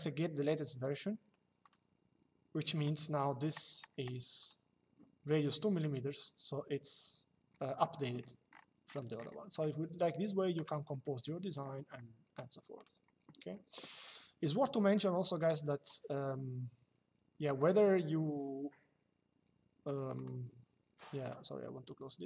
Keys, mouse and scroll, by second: 1.3 click, 4.1 click, 9.3 shift+middle click, 10.8 middle click, 12.5 click, 15.1 click, 17.3 click, 19.8 click.